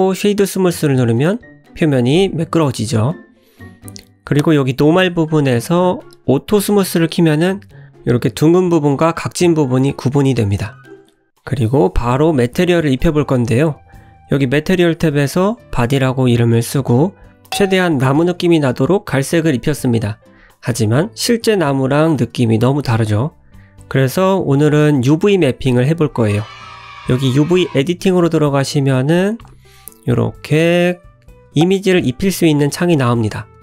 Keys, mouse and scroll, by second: 1.5 scroll down 2, 1.7 middle click, 3.1 click, 5.2 click, 6.3 click, 6.7 scroll down 1, 6.9 middle click, 9.0 click, 10.2 click, 11.2 click, 12.0 click, 16.2 click, 18.4 click, 18.8 middle click, 21.9-22.2 scroll down 4, 22.4 click, 23.5 click, 24.8-25.9 scroll up 1.